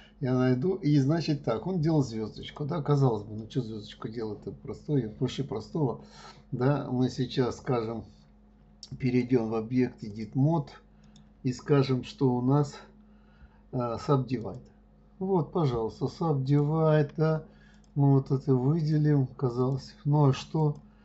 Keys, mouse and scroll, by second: 2.4 click, 3.3 right click, 9.0-11.0 drag, 11.0 right click, 16.4 click, 17.7 shift+click, 18.8 shift+click, 19.5 shift+click, 20.6 shift+click.